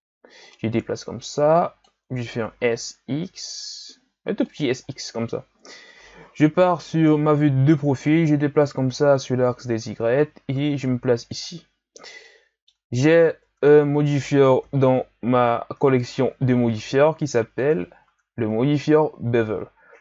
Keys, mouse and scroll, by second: 0.4-2.5 drag, 2.5 s, 6.5 KP_3, 8.0-11.1 drag, 12.2-13.4 middle drag, 13.4 Tab, 14.6 KP_1, 15.5-15.9 scroll up 1, 15.9 ctrl+scroll down 1, 16.1 Tab, 16.7-18.0 drag, 18.0 Tab, 18.5-19.5 scroll down 5, 19.5-20.0 scroll down 5.